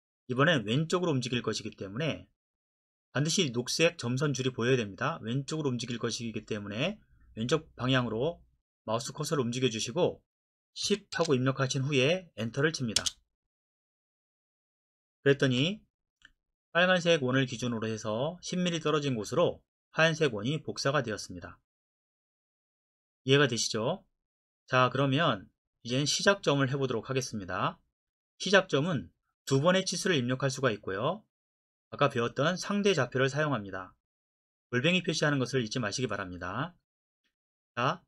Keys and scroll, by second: 10.9 KP_1, 11.2 KP_0, 13.0 Return, 15.5 Escape.